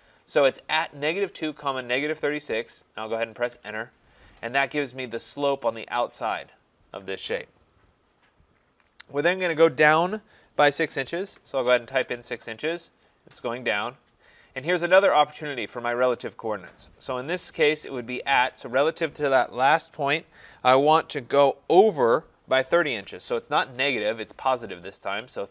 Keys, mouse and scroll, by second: 3.6 Return, 11.3 6, 11.8 Return, 13.6 click, 14.4 scroll, 15.1-16.8 scroll, 16.8 scroll, 17.7 @, 23.7 typing.